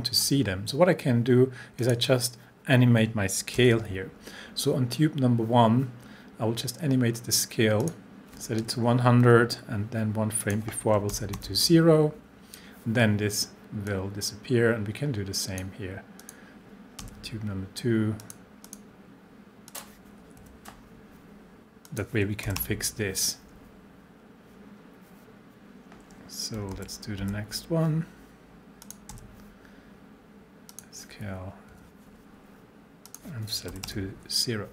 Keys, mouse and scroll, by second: 1.8 click, 3.6 s, 7.8 click, 9.2 Page_Up, 10.4 click, 11.1 0, 13.9-15.7 drag, 17.0 s, 18.2 click, 20.4 Page_Up, 21.9 click, 22.5 0, 26.7 k, 27.2 k, 28.8 click, 29.1 s, 30.7 click, 31.7 Page_Up, 33.1 click, 33.7 0.